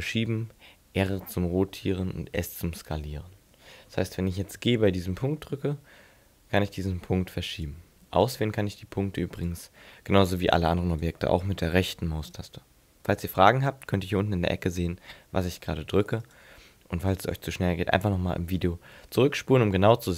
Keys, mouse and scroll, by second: 5.1 g, 7.7 right click, 8.2 right click, 9.4 right click, 10.9 right click, 12.3 right click, 16.2 right click.